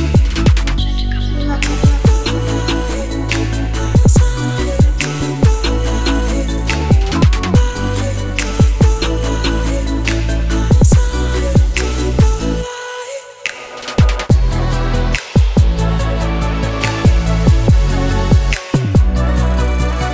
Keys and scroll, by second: 5.0-6.3 typing.